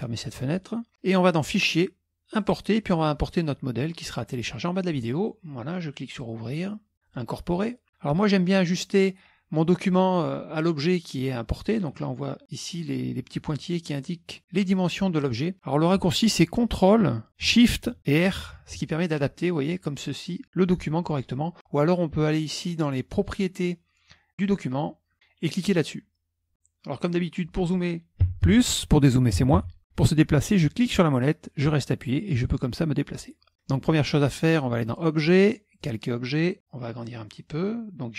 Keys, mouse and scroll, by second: 0.4 click, 1.5 click, 2.5 click, 4.4 click, 6.3 click, 7.1 click, 18.7 ctrl+shift+r, 21.1-21.7 scroll up 2, 24.5 click, 27.1 click, 28.3 KP_Add, 28.5 KP_Add, 29.5 KP_Subtract, 29.7 KP_Subtract, 30.8-31.5 scroll up 1, 31.5-32.2 scroll down 2, 32.2-34.0 middle drag, 34.9 click, 35.8 click, 37.1 click.